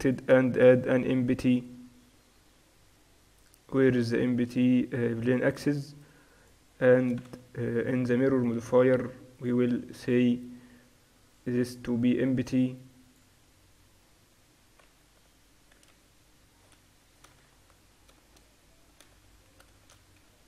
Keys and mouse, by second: 0.7 shift+a, 6.5-9.3 middle drag, 7.3 z, 9.4-13.1 drag, 13.6-16.0 drag, 16.0 s, 17.5-19.7 middle drag, 19.7 ctrl+alt+shift+c.